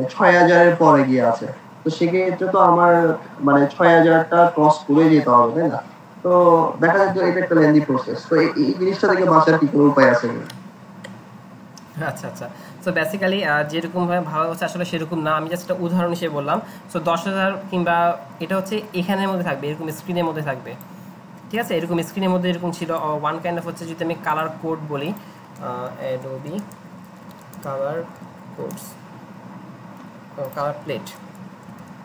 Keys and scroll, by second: 16.5 alt+Tab, 23.4 alt+Tab, 25.4-29.1 typing, 31.0 ctrl+shift+Left, 31.0-32.0 typing.